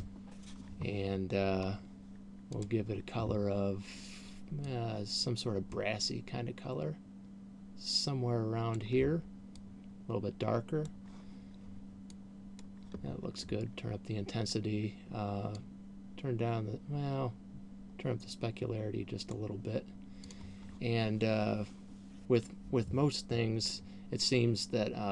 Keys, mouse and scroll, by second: 1.7-2.9 scroll down 4, 2.9 click, 12.4 click, 16.2 click, 20.7 click.